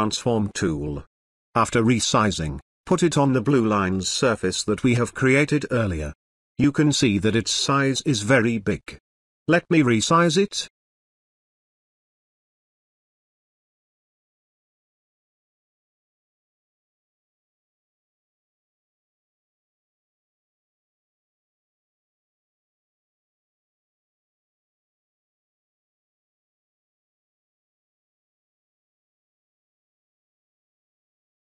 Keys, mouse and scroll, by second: 0.7-2.2 drag.